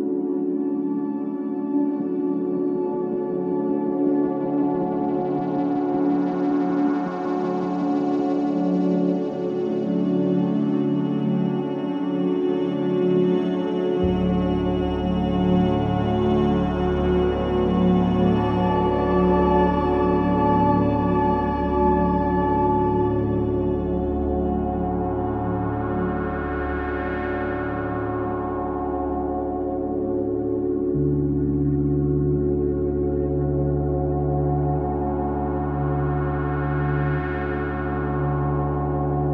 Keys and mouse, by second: 1.2-2.0 ctrl+alt+drag, 6.5 alt+shift+drag, 7.3 shift+click, 8.0 shift+click, 8.9 shift+click, 9.9-10.2 ctrl+alt+drag, 10.4-10.8 alt+shift+drag, 11.5 shift+click, 12.1-12.4 ctrl+alt+drag, 13.4-14.0 alt+drag, 14.2 ctrl+alt+click, 15.1 shift+click, 16.2 m, 16.7 click, 18.3-19.5 typing, 20.6-21.3 typing, 22.4-23.2 drag, 23.3-24.5 typing, 24.0-25.2 alt+shift+drag, 26.5 click, 28.2 click, 29.7 click, 29.8-30.5 typing, 32.2 click, 33.9 click, 34.4 click, 36.9 click.